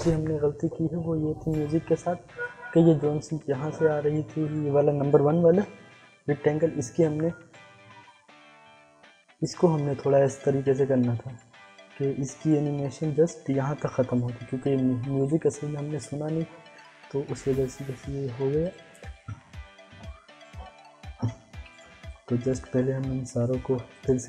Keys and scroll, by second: 5.5 u.